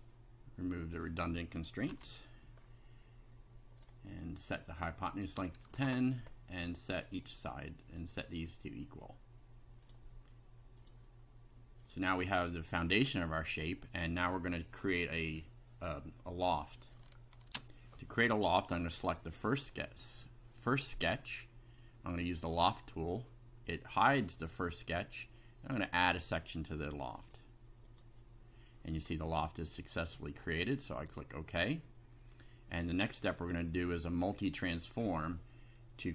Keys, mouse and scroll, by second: 0.8 click, 1.9 Delete, 3.8 click, 4.7 click, 5.6 KP_1, 5.7 KP_0, 5.9 Return, 7.1 click, 8.1 click, 9.8 click, 10.8 click, 11.8 middle click, 13.4 scroll down 2, 17.5 ctrl+r, 19.0 click, 22.2 click, 25.8 click, 27.1 click, 27.8 click, 29.1-29.8 middle drag, 30.9 click, 31.8-32.4 middle drag, 32.9-34.3 middle drag.